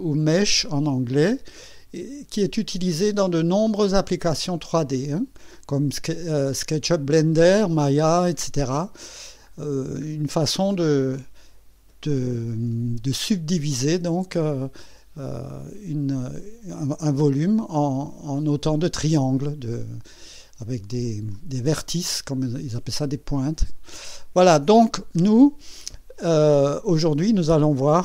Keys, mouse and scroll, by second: 1.0 scroll up 1, 1.6 scroll up 2, 2.3 scroll up 2, 9.5-9.8 scroll down 1, 24.2-24.6 scroll down 1, 25.1-25.4 scroll down 2, 27.9 click.